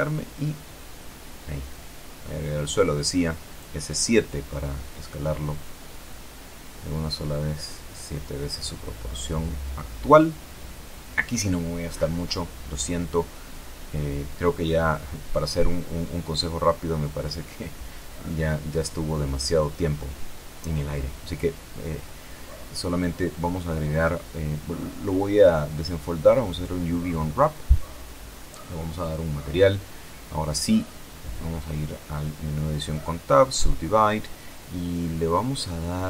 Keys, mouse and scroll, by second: 0.2 click, 1.7 shift+a, 2.6 click, 4.2 KP_5, 4.3 KP_7, 4.5 KP_Enter, 7.0-13.2 drag, 14.5-18.2 drag, 28.3 click, 29.4 middle click, 31.7 Tab, 32.9 w, 34.2 click.